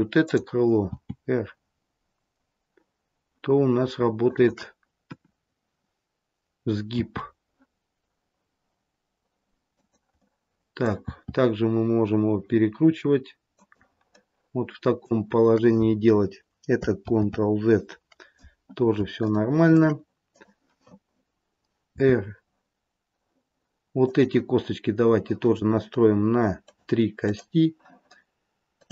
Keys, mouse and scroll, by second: 0.1 click, 0.7 r, 4.9 KP_1, 6.9 r, 10.2 middle click, 11.0 r, 14.1 middle click, 17.1 ctrl+z, 19.2 shift+middle click, 20.3 click, 21.9 r, 26.6 click, 27.2 click.